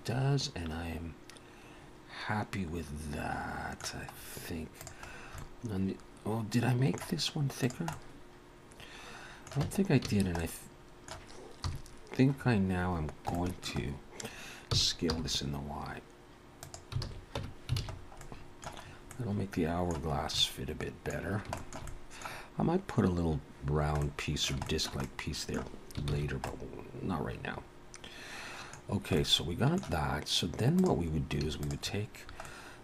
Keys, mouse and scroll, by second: 4.1-4.6 scroll up 2, 4.8 click, 5.1-6.2 scroll down 3, 5.4 middle click, 7.6 click, 7.9 middle click, 9.6 Tab, 9.6 middle click, 10.1 a, 10.3 middle click, 11.6 KP_3, 12.4-13.3 scroll up 1, 13.3 scroll up 2, 13.3 shift+middle click, 13.8 scroll down 1, 14.7 s, 17.0 alt+a, 17.4 Tab, 17.8 alt+a, 17.9-18.8 scroll down 3, 18.2 middle click, 18.8-19.2 scroll up 2, 19.1 middle click, 20.1 scroll up 2, 20.4 middle click, 21.2-21.6 scroll down 3, 21.6 shift+middle click, 21.9 middle click, 24.3 shift+middle click, 24.7 shift+middle click, 24.7 shift+middle click, 25.1 middle click, 26.2 ctrl+s, 26.5 middle click, 28.9 scroll down 1, 29.2 middle click, 30.8 click, 31.6 shift+click, 32.5 middle click.